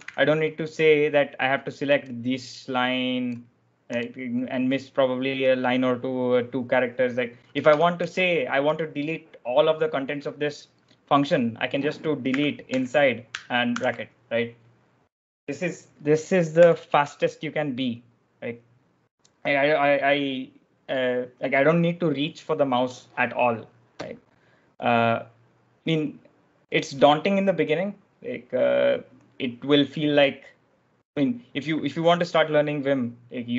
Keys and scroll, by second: 0.0 ctrl+j, 0.0 ctrl+l, 7.1-8.3 typing, 12.1 d, 12.5 i, 13.6 shift+b, 16.5 u, 31.8 w.